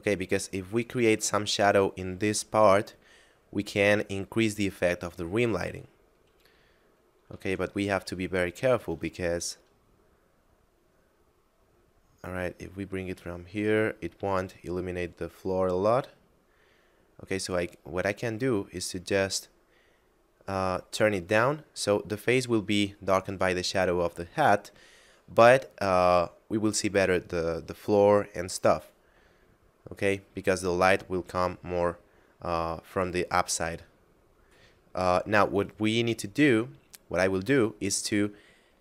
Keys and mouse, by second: 0.8 click, 8.3 shift+middle click, 9.3 r, 20.9 click, 23.7 middle click, 28.7 middle click, 34.1 middle click.